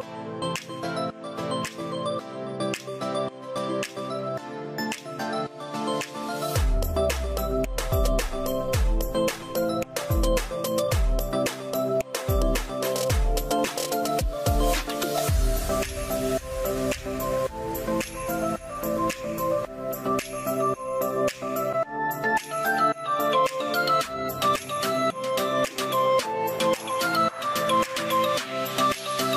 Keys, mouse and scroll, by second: 16.1 Return, 16.1 0, 16.1 double click.